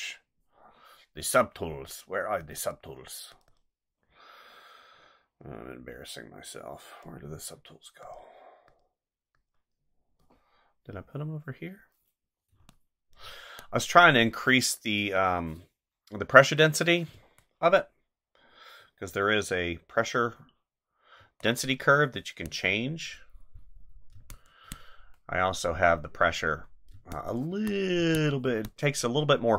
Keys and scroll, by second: 12.5 space, 14.3 ctrl+z, 17.1 space, 21.2 space, 24.1 space, 26.9 space.